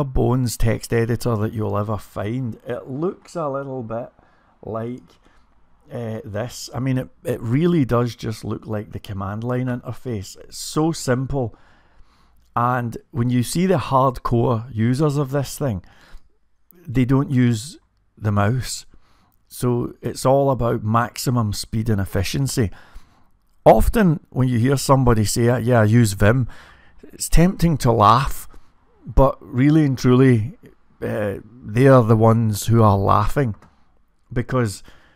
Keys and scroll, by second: 14.3 typing, 16.0-17.1 typing, 18.9-21.8 typing, 22.9-24.5 typing.